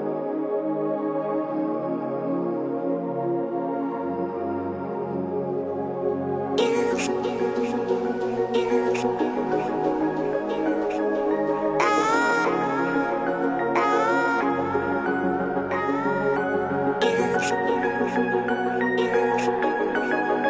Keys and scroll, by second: 5.2 ctrl+z, 6.5 ctrl+z, 13.8 ctrl+z, 16.2 ctrl+z.